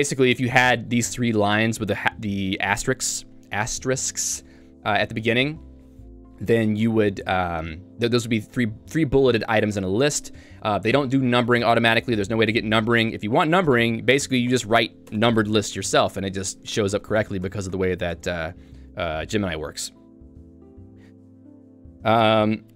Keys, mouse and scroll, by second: 0.0-1.3 typing, 3.8-5.4 typing, 8.1 l, 10.2 j, 13.5-15.0 typing, 13.9 Return, 16.9 BackSpace, 17.2 BackSpace, 21.3 Escape, 21.9 j.